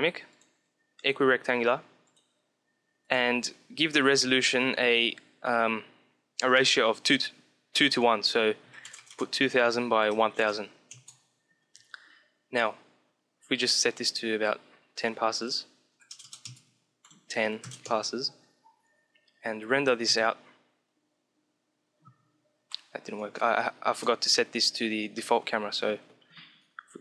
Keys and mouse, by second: 1.7-4.9 drag, 13.6-15.1 drag, 16.8-18.5 drag, 22.5 F12, 22.5 Escape, 23.2-25.0 drag.